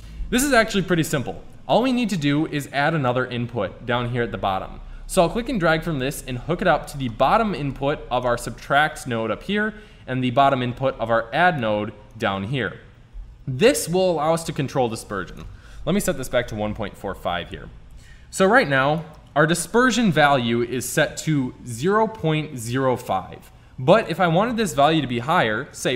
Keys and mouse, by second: 0.1 middle click, 3.1 click, 7.3 middle click, 8.2 right click, 10.1 middle click, 13.7 Tab, 17.3-18.5 middle drag, 18.5 click, 22.2-24.1 middle drag, 24.4-25.9 drag.